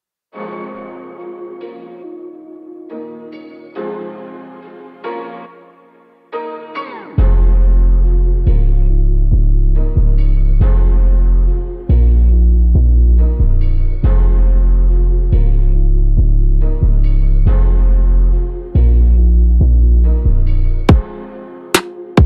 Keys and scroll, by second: 6.1 ctrl+-, 21.7 ctrl+v.